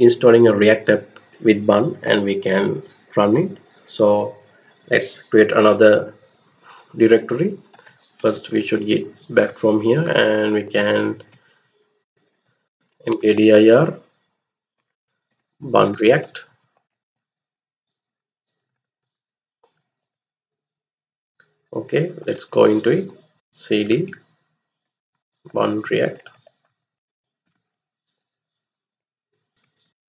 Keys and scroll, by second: 7.4-9.0 typing, 9.3 Return, 11.1-13.4 typing, 14.5-17.5 typing, 18.6 Left, 18.7 Left, 19.7-20.4 typing, 21.1 Return, 21.9-23.3 typing, 24.5-27.6 typing, 29.2-30.0 typing.